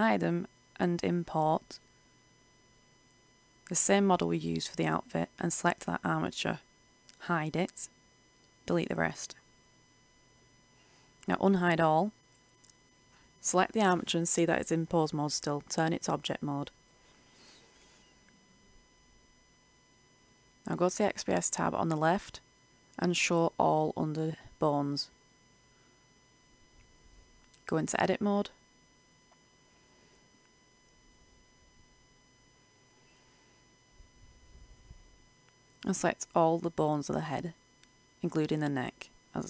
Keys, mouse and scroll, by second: 2.0 Return, 5.2 right click, 7.5 h, 8.2 a, 9.3 Delete, 9.6 Return, 11.2 alt+h, 13.0 right click, 15.0 click, 16.7 Tab, 19.0 Tab, 21.2 click, 26.0 middle click, 29.1 KP_Decimal, 30.5 Tab, 32.1 KP_Decimal, 32.9-33.8 scroll down 1, 34.0-34.3 ctrl+scroll, 35.1-36.9 middle drag, 37.1 c, 38.1-39.2 scroll down 1, 39.2-39.4 scroll up 1.